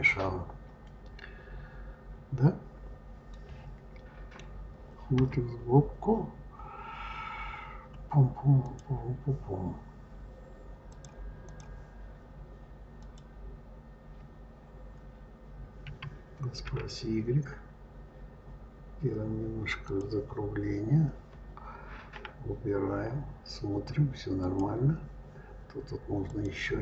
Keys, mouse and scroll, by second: 1.1-3.2 scroll down 1, 3.2-5.0 middle drag, 5.0 KP_3, 8.5 click, 10.7-13.0 drag, 15.7 s, 22.1 KP_Divide, 24.2 click, 26.1 click.